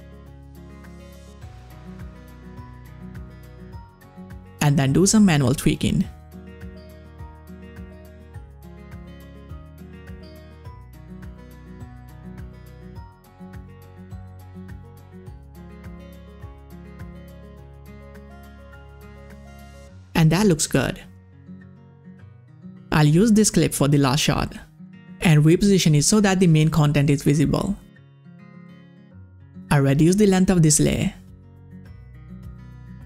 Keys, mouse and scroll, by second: 0.2 scroll up 1, 1.1 scroll down 1, 3.3 click, 3.4 click, 5.3 click, 7.0-10.0 drag, 11.0-17.7 drag, 19.2-20.6 drag, 21.4 click, 23.4-29.1 drag, 30.6-33.0 drag.